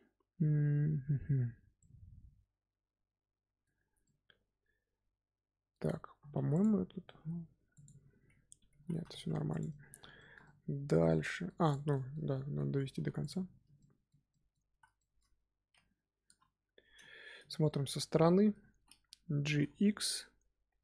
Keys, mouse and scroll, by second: 1.7-3.6 middle drag, 3.6 scroll up 1, 3.7 scroll down 3, 4.0-5.8 middle drag, 5.8 Tab, 6.3 3, 6.4 click, 7.0 g, 8.2-8.7 scroll down 1, 8.7 ctrl+z, 9.0 Tab, 9.2 scroll down 1, 9.4 click, 9.6-11.6 middle drag, 11.6 click, 11.9-12.2 shift+middle drag, 12.2 Tab, 12.9 3, 13.1 click, 13.7-14.6 shift+middle drag, 14.6 z, 14.9 shift+middle click, 15.7 KP_3, 16.6-17.2 scroll down 1, 17.4 shift+middle click, 17.9 scroll up 1, 18.1-19.4 shift+middle drag, 19.4 g.